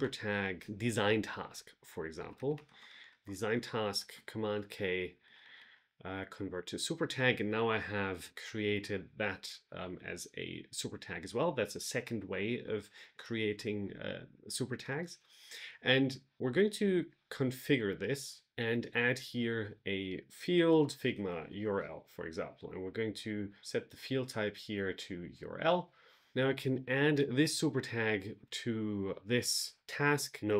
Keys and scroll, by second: 2.9 space, 4.0 super+k, 6.4 Return, 20.3-21.9 typing.